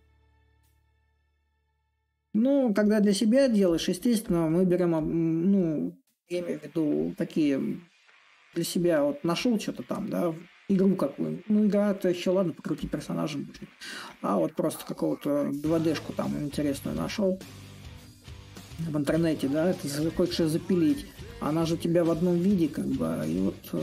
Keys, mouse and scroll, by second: 1.0 s, 2.5-7.6 drag, 8.0-13.1 drag, 13.8 click, 14.7 click.